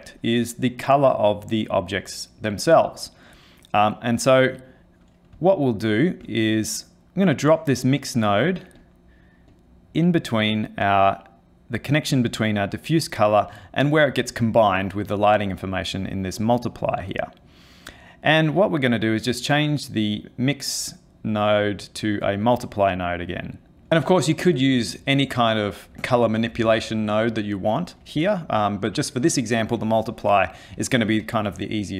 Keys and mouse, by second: 4.2 click, 5.4 ctrl+middle click, 6.3 middle click, 7.6 click, 8.8 click, 9.5 click, 18.3 click.